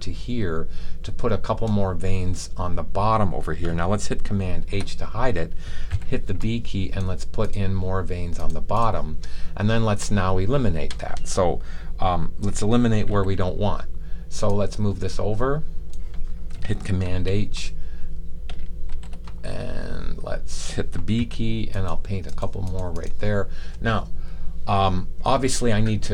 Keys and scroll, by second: 4.5 super+h, 5.8 b, 13.0 m, 17.0 super+h, 18.8 super+h, 21.0 b.